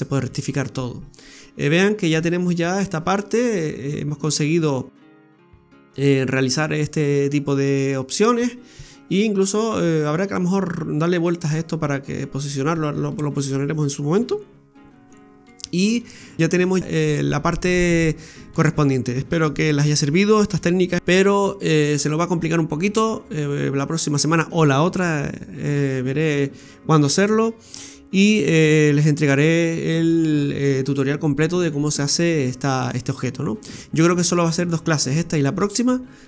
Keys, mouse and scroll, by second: 0.3-1.2 scroll up 1, 1.2 scroll up 2, 2.3 middle click, 18.2-18.8 scroll up 2, 18.8-19.4 scroll down 1, 19.4 scroll down 1.